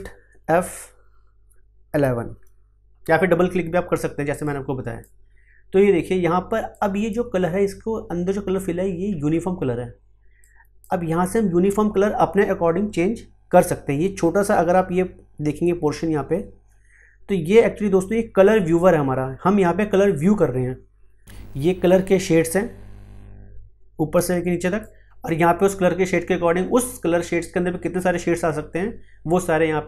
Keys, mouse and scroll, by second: 2.0 shift+F11, 4.4-10.4 drag, 10.4-21.8 drag, 21.8-29.8 drag.